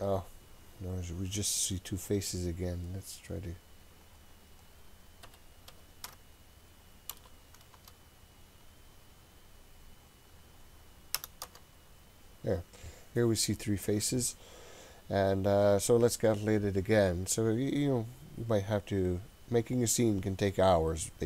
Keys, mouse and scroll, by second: 4.1-9.2 drag, 10.0-12.8 drag.